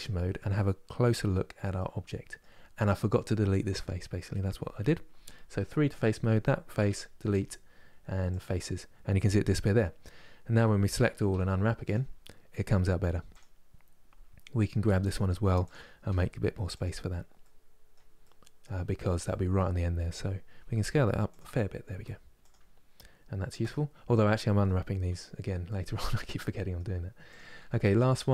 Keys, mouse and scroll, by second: 0.7 KP_Decimal, 1.5 middle click, 2.4-5.2 scroll down 1, 5.2 3, 5.6 click, 8.0 Delete, 10.2 a, 11.6 u, 13.0 click, 14.6 g, 15.8 s, 17.1-18.5 middle drag, 18.5-19.0 scroll down 1, 19.0-20.3 middle drag, 20.3 s, 21.6 g, 22.8-23.3 scroll down 1, 23.3 Tab, 23.7 scroll down 3, 24.1 middle click, 24.8 KP_Divide, 25.3-27.0 middle drag, 27.0 click, 27.3 Tab.